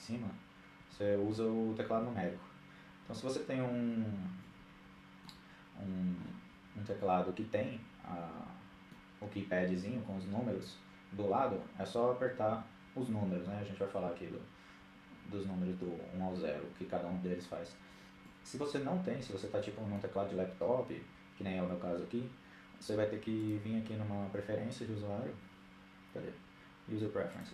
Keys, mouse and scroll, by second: 0.3 KP_1, 0.5 KP_3, 1.4 KP_7, 2.6 KP_1, 3.8-5.4 middle drag, 5.4-6.6 scroll down 1, 6.6-8.0 middle drag, 8.4-9.8 scroll up 1, 9.8 scroll up 1, 18.0-19.6 middle drag, 23.4-24.8 drag.